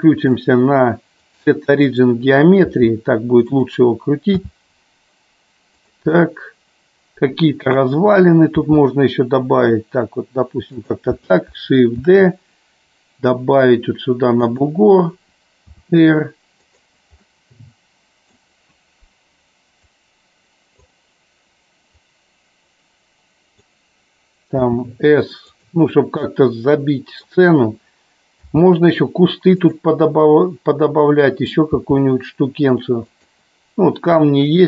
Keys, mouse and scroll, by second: 0.4-2.2 drag, 3.6 click, 4.4 g, 6.0 click, 6.3-8.0 middle drag, 12.2 shift+d, 14.6 click, 17.4-18.7 middle drag, 19.8-21.1 drag, 22.2-23.8 drag, 25.7 click, 26.4-27.6 middle drag, 29.8 click, 30.2-31.7 middle drag.